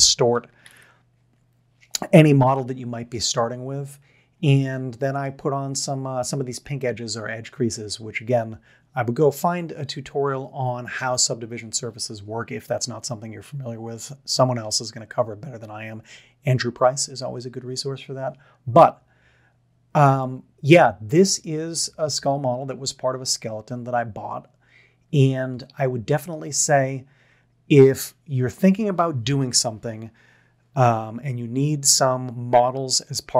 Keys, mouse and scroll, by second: 0.7 ctrl+z, 20.2-21.7 middle drag.